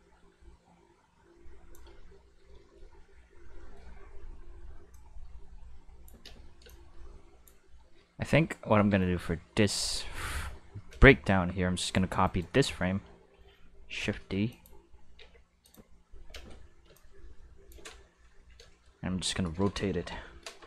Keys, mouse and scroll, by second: 3.4 middle click, 3.5 shift+middle click, 4.9-6.0 drag, 6.2 space, 6.3 click, 6.6 space, 6.6-7.4 drag, 8.7 Tab, 10.0 q, 10.9 a, 11.8 right click, 12.2 right click, 14.0 shift+d, 14.5 click, 15.1 shift+s, 15.6 click, 16.3 space, 16.8 space, 16.9-17.7 drag, 18.3 a, 20.0 ..